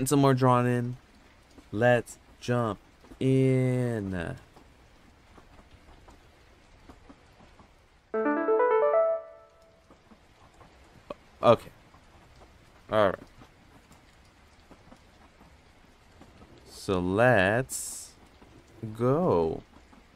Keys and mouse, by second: 15.7 click, 16.9 click, 18.2 click.